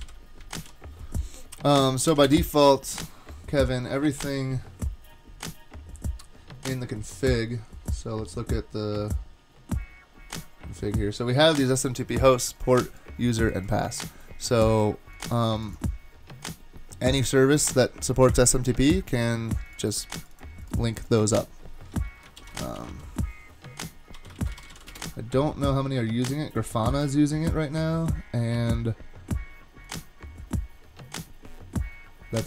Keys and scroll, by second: 0.0 Down, 0.6 super+s, 2.3 Return, 22.4 shift+super+f, 22.4-25.2 typing.